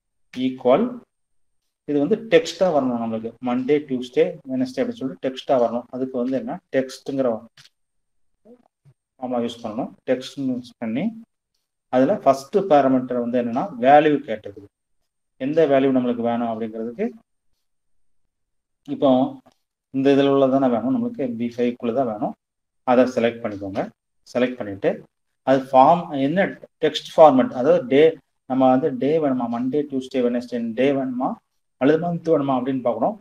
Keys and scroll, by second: 5.4 i, 5.8 e, 6.2 x, 6.7 i, 9.3 shift+9, 22.9 ,.